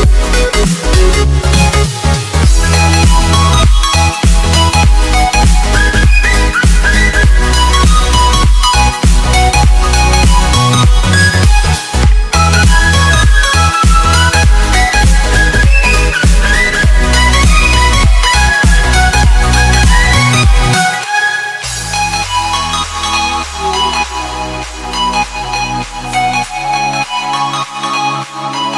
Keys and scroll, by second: 1.1 Return, 4.3 Return, 4.9 ctrl+j, 21.9 e, 26.2 z.